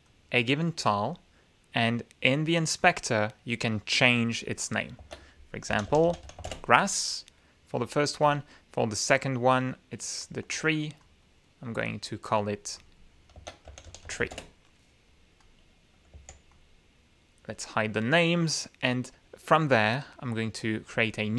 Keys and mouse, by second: 0.0 click, 0.8 click, 2.7 click, 4.9 ctrl+a, 5.4-6.7 typing, 8.2 click, 9.7 click, 10.5 click, 11.0 click, 11.4 click, 12.3 click, 13.3 ctrl+a, 13.6 ctrl+t, 13.8 ctrl+r, 14.0 ctrl+e, 14.3 ctrl+Return, 16.1 click, 17.2 alt+click, 18.3 middle click, 18.4 click, 19.0 middle click, 19.6 click.